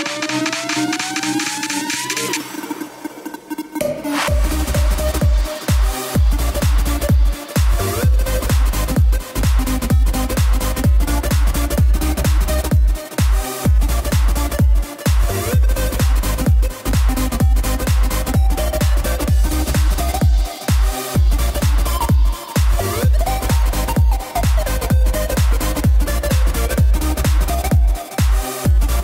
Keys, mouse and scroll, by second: 11.5-16.1 drag, 18.0-26.1 drag, 28.2-29.0 drag.